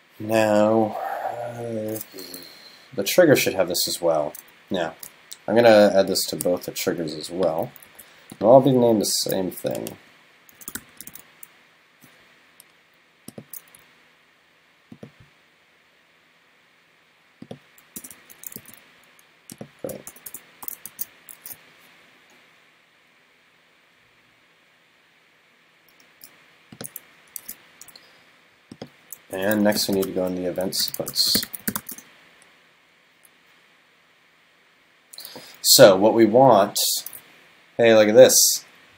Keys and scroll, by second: 7.9 super+c, 9.2 super+., 20.9 super+s, 27.4 super+s, 29.4 super+..